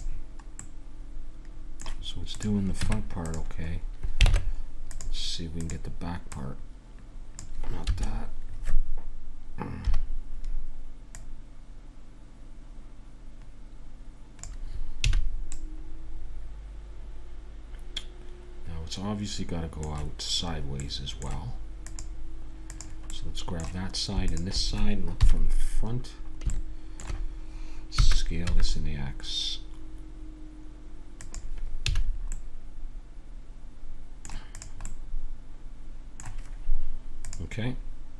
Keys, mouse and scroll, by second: 0.5-2.3 middle drag, 2.3 right click, 2.8 Tab, 2.8-4.1 drag, 4.1 middle click, 4.3 ctrl+Tab, 5.6-9.6 drag, 9.9 KP_3, 11.1-13.0 middle drag, 15.0 a, 15.5 middle click, 16.1-17.5 middle drag, 19.3-21.8 middle drag, 21.8-25.2 drag, 25.2 KP_1, 26.5-28.4 middle drag, 27.9 s, 31.8 a, 32.0-33.9 middle drag, 34.5 click, 35.0-37.4 middle drag.